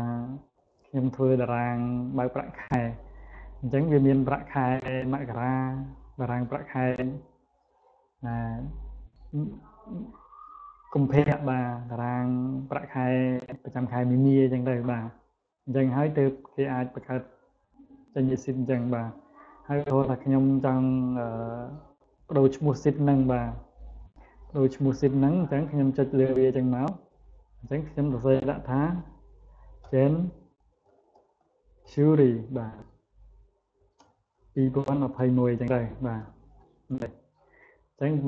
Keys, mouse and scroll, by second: 5.1 click, 5.9 click, 11.7 click, 15.4 click, 16.3 click, 16.7 click, 17.1 click, 19.1 click, 19.6 click, 22.8 right click, 24.7 click, 30.7 a, 31.7 a, 32.0 r, 33.8-35.5 typing.